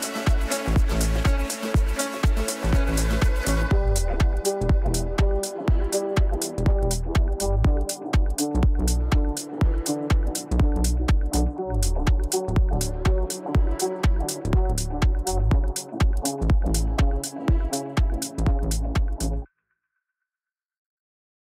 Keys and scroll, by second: 7.7 w, 9.8 shift+F2, 13.0 ctrl+z, 13.8 ctrl+z, 14.5 shift+F2, 16.6 g.